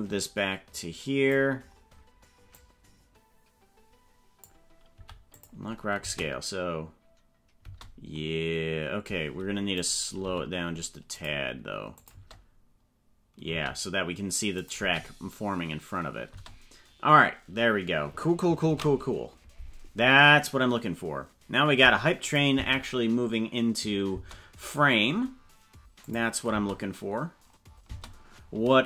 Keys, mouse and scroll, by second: 2.7-4.3 drag, 5.1 i, 6.1 space, 7.6 space, 9.9 right click, 10.3 g, 12.1 click, 12.1 space, 13.5 space, 14.6 click, 14.7 space, 16.5 space, 19.3 ctrl+s, 22.3 click, 22.7 space, 24.3 space, 26.1 click, 26.5 space, 27.9 space.